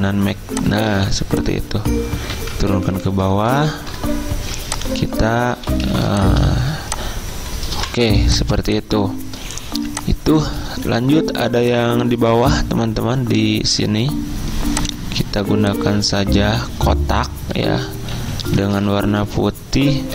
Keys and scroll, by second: 2.4 ctrl+[, 2.8 ctrl+[, 3.0 ctrl+[, 3.1 ctrl+[, 6.0 typing, 10.3 typing, 12.4 v, 18.6 d.